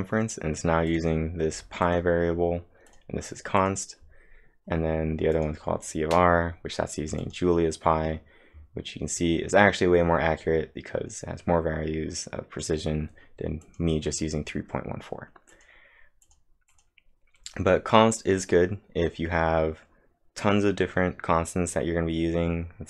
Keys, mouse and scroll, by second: 0.7-1.4 typing, 0.9 click, 1.8 click, 2.9 click, 4.0 click, 5.9-7.2 scroll up 2, 7.2 click, 13.6 click, 13.6 scroll up 1, 14.8-15.5 typing, 15.5 click, 16.2 click.